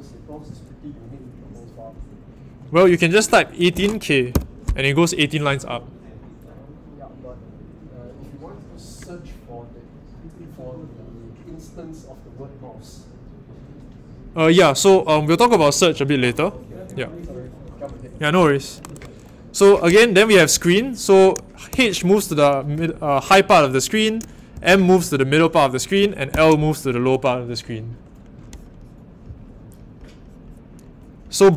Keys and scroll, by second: 3.3-4.3 typing, 21.7 shift+h, 24.5 shift+m, 26.2 shift+i.